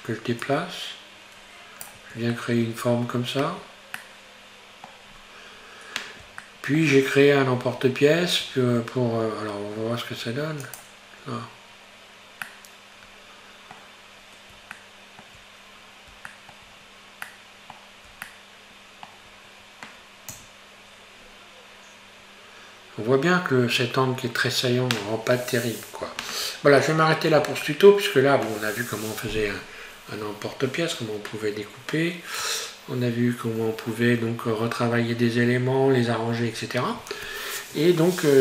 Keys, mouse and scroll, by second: 0.5-2.0 drag, 2.0 Tab, 2.4 middle click, 3.2 scroll down 4, 3.5 Tab, 4.0-5.2 middle drag, 5.2-6.4 scroll up 3, 6.5-7.7 shift+middle drag, 7.7 Tab, 8.6 Tab, 9.8-10.8 scroll down 5, 10.8 click, 12.5-14.2 middle drag, 14.2-14.8 scroll up 1, 14.8-16.8 shift+middle drag, 16.8-17.3 scroll down 3, 17.3-20.3 middle drag, 20.3 Tab, 21.3-21.6 scroll up 2, 26.8-30.7 middle drag.